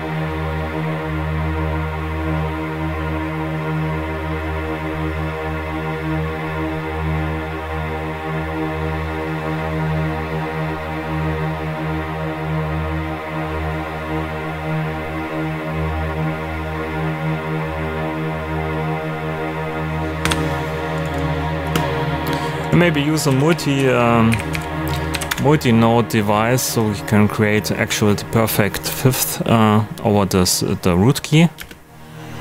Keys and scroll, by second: 20.2 Delete, 21.6 space, 23.0-25.0 typing, 25.1 Down, 25.2 Return, 31.5 space.